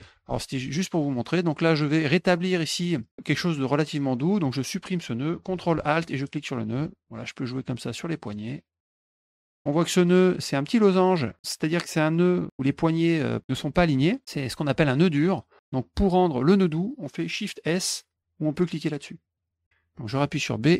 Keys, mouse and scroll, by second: 1.1-2.7 drag, 6.2 ctrl+alt+click, 7.6 click, 8.8 click, 9.9 click, 12.5-15.6 drag, 19.2 click.